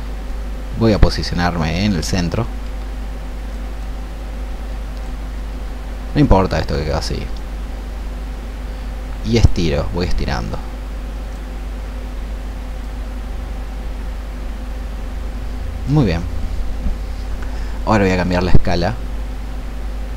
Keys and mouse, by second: 3.7-5.1 drag, 6.7-20.1 drag.